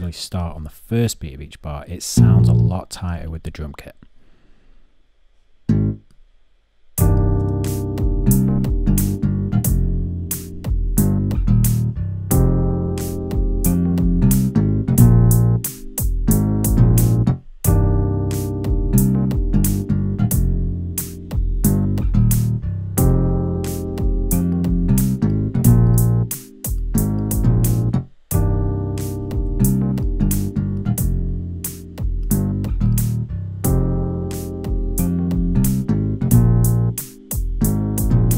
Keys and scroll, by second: 35.3 alt+x.